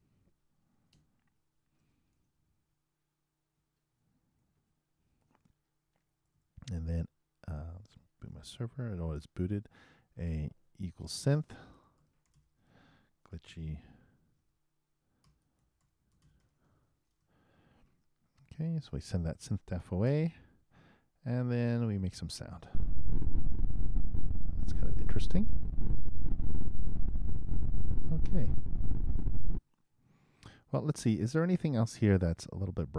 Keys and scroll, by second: 1.9 shift+Up, 2.1 shift+9, 4.7 shift+Return, 5.2 shift+0, 6.2 shift+Return, 8.4 super+b, 11.4 shift+space, 11.5 shift+s, 12.9 shift+h, 14.1 shift+\, 16.4-17.7 typing, 20.0 super+Return, 22.7 super+Return, 29.5 super+..